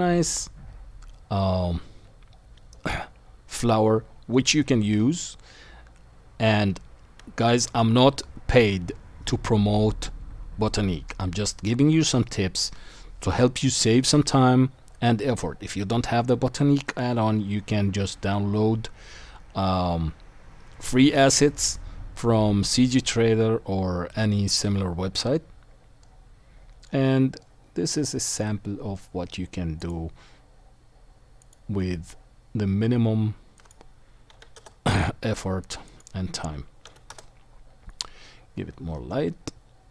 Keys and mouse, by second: 0.2-16.4 drag, 26.1 middle click, 26.3-28.4 middle drag, 28.8-29.9 middle drag, 29.9-31.4 right drag, 31.4 middle click, 31.5-33.6 right drag, 33.6-39.9 middle drag, 38.1-39.9 drag, 38.1-39.9 right drag.